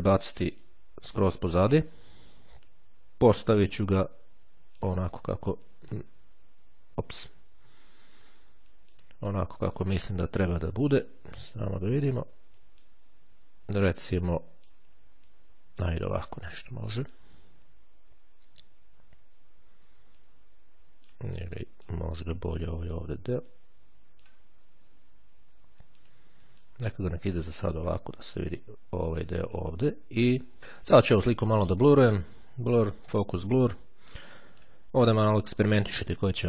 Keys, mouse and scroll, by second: 0.2-1.3 drag, 3.9-5.8 drag, 5.8 click, 7.8 ctrl+z, 8.8 click, 9.7 click, 11.0-11.6 ctrl+scroll down 2, 12.0-13.6 ctrl+drag, 14.4-16.6 drag, 17.0 click, 18.7-21.8 drag, 22.8 click, 23.7-25.0 drag, 26.0-30.6 drag, 31.6 click, 33.2 click.